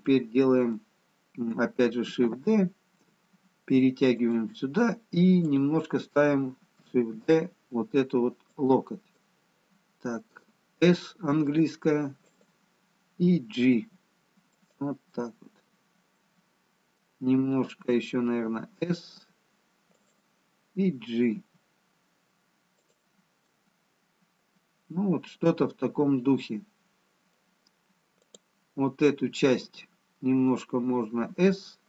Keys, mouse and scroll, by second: 0.1 middle click, 3.2 shift+d, 5.5 click, 7.2 shift+d, 11.6 middle click, 11.6 s, 13.8 g, 15.2 middle click, 18.6 s, 21.4 g, 23.6 middle click, 30.5 click, 31.5 s.